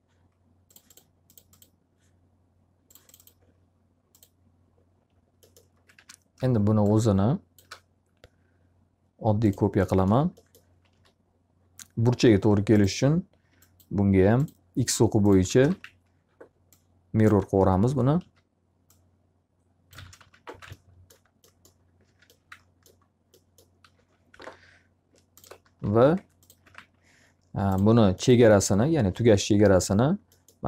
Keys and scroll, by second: 5.5 w, 10.5 s, 14.9-16.2 typing, 18.1 s, 19.9 space, 20.1 x, 20.4 z, 20.5 alt+a, 22.0 q, 24.2 F3, 25.7-27.2 typing.